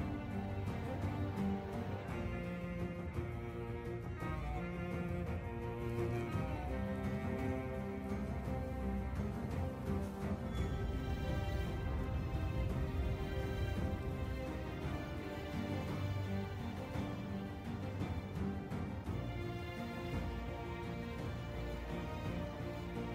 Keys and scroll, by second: 2.5 ctrl+j, 3.0 Delete, 4.5-5.4 typing, 7.6 Tab, 8.6-14.5 typing, 15.0 Tab, 16.5 shift+d, 16.6 Escape, 17.4 ctrl+j, 18.7 Delete, 19.1 Tab, 19.2 Delete, 21.2 Tab, 21.7-23.1 typing.